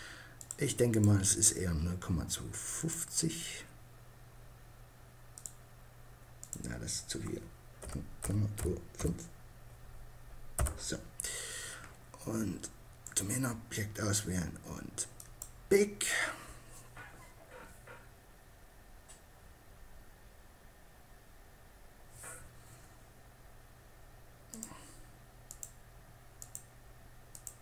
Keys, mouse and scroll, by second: 1.9-3.6 right drag, 4.4-7.0 drag, 7.0 right click, 12.2-13.8 right drag, 14.2-15.9 drag, 23.6-24.7 drag.